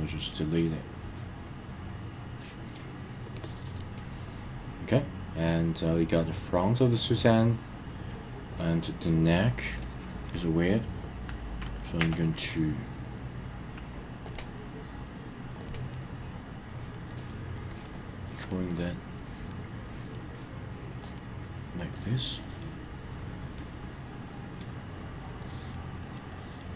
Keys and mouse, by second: 0.6-2.7 middle drag, 3.3 click, 4.0-9.1 middle drag, 9.8 click, 13.0 b, 15.6 click, 16.7 click, 17.1 click, 17.7 click, 18.2 click, 18.7 click, 19.2 click, 19.9 click, 20.9 click, 21.9 click, 22.4 click, 23.5-24.6 middle drag, 25.4 click, 26.0 click, 26.3 click.